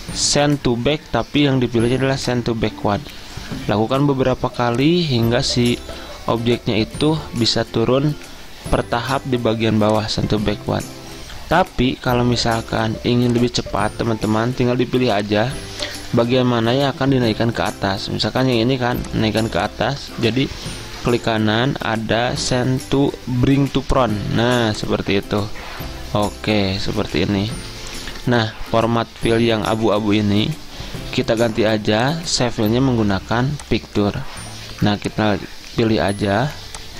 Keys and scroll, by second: 5.9 ctrl+z, 16.6 ctrl+z, 20.2 ctrl+z.